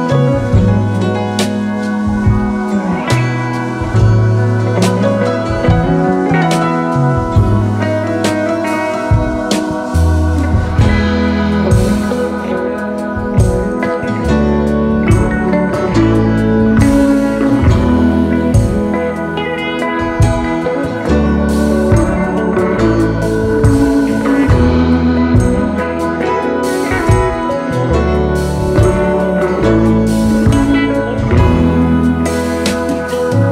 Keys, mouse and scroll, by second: 0.9 double click, 1.6 shift+click, 1.9-3.2 alt+scroll down 6, 3.4 space, 3.9-4.9 alt+scroll down 1, 6.8-7.5 alt+scroll up 4, 11.5 double click, 15.8 v, 16.3-17.4 alt+scroll down 5, 17.4 space, 17.9-18.5 scroll up 4, 17.9 space, 19.0-20.0 alt+scroll up 2, 21.2 double click, 22.3 shift+click, 22.9-23.5 alt+scroll down 5, 23.8 space, 24.3-24.9 space, 26.4-27.3 space, 29.3-30.5 space, 32.4 space.